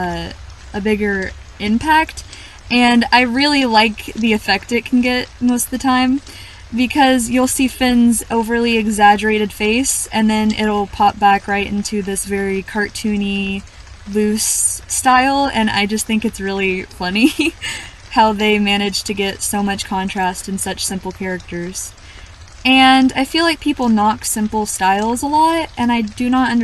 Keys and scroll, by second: 0.7-1.1 scroll up 1, 2.3 scroll up 1, 2.4-2.9 scroll down 1, 3.2-3.8 scroll down 1, 5.6 scroll up 1, 7.1-7.6 scroll down 1, 7.8-8.6 scroll up 1, 10.6-10.9 scroll up 1, 10.9-11.3 scroll down 1, 13.5 scroll up 1, 13.7-14.4 scroll down 1, 15.3-15.7 scroll down 1.